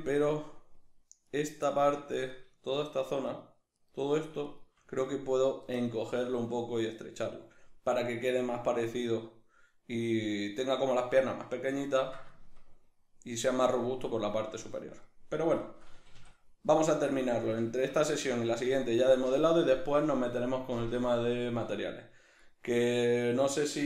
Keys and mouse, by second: 0.3 right click, 1.3 right click, 1.7-2.3 ctrl+middle drag, 2.3 right click, 2.7 shift+right click, 3.3 shift+right click, 3.8 shift+right click, 4.5 shift+right drag, 11.2-16.4 middle drag, 15.9 a, 17.4 shift+middle click, 19.4 middle click.